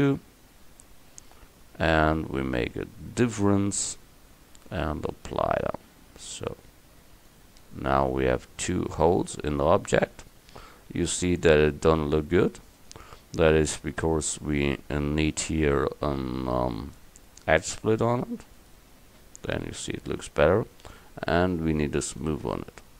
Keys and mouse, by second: 2.0-6.5 drag, 7.7 click, 8.1 middle click, 9.8 middle click, 17.3-19.7 drag, 22.1-22.9 drag.